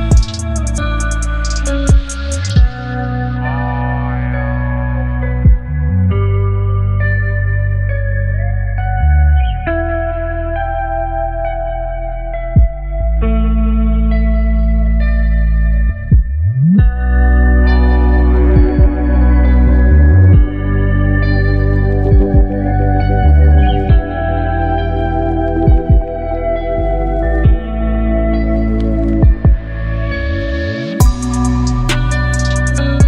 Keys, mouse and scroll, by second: 1.0 Return, 2.5 ctrl+0, 5.7 ctrl+0, 6.6 shift+click, 9.2-13.7 shift+drag, 15.6 shift+click, 17.3 ctrl+t, 20.3 ctrl+t, 20.4-26.1 shift+drag, 26.1 Return, 28.0 click, 29.9 right click, 30.8 click, 32.2-33.0 drag.